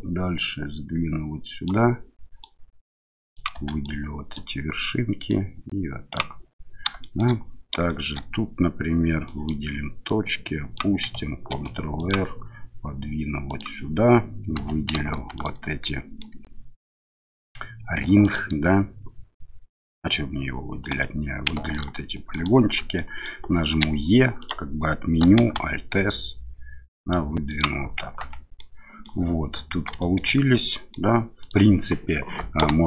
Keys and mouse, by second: 2.5 click, 3.5 1, 3.9 click, 5.3 click, 7.0 shift+middle click, 7.8 shift+middle click, 9.3 click, 10.1 click, 11.5 ctrl+r, 13.5 click, 14.6 2, 15.3 alt+click, 15.8 middle click, 18.2 ctrl+alt+click, 20.9 3, 21.7 alt+click, 22.3 alt+click, 22.9 middle click, 23.8 e, 24.4 click, 25.4 alt+s, 27.5 click, 28.2 Tab, 28.6-29.1 middle drag, 30.0 shift+middle drag, 30.7 middle click, 31.4 click, 32.6 Delete.